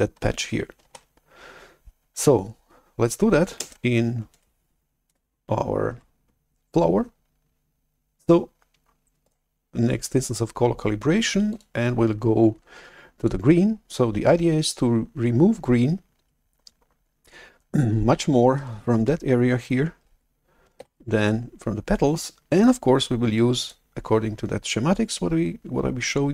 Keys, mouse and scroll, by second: 0.9 shift+super+F11, 3.5 alt+Tab, 4.2 alt+Tab, 6.1 alt+Tab, 9.4 right click, 11.4 click, 13.1 click, 20.9 shift+super+F11.